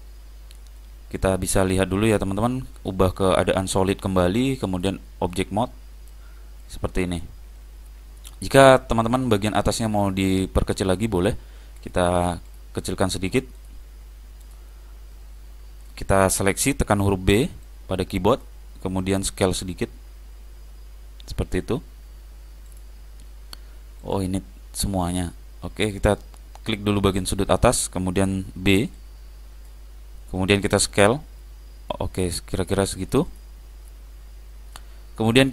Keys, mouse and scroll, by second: 2.0-4.5 drag, 4.8 click, 6.2-9.6 middle drag, 11.9-15.3 drag, 15.2-17.0 middle drag, 16.9 b, 19.6 s, 24.1-26.8 drag, 27.3 click, 28.4 b, 30.9 s, 33.9-35.5 middle drag.